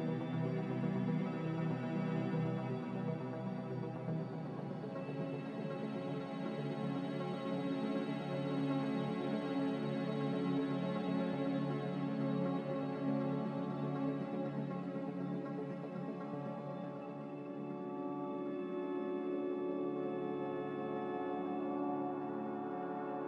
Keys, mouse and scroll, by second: 0.0 ctrl+z, 4.1 z, 6.2-7.1 typing, 10.6 g.